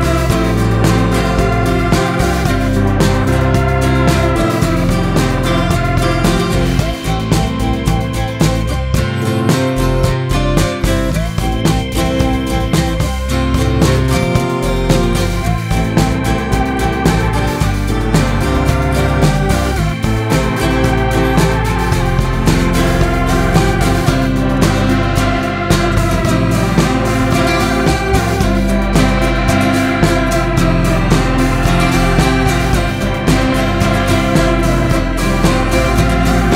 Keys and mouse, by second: 2.8-4.2 drag, 8.4-10.0 drag, 15.5 KP_7, 17.5 g, 24.7 middle drag, 24.8 click, 24.9 middle drag, 25.0 drag, 25.1-26.1 middle drag, 26.9 shift+middle drag, 28.0 shift+middle click, 36.1 click.